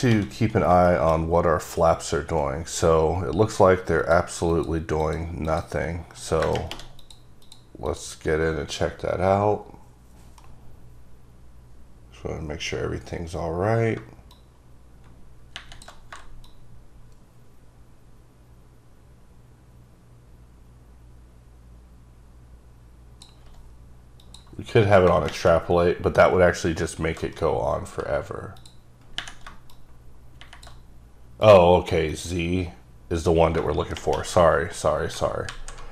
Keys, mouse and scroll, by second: 0.6 scroll down 2, 1.0 shift+middle click, 4.1 click, 4.6 click, 5.3 click, 5.7 click, 7.1 click, 7.5 click, 8.0 click, 12.3-14.0 scroll down 5, 14.4 shift+click, 16.5 shift+click, 28.7 click, 29.8 click, 31.5 click, 32.2 click, 35.6 alt+z.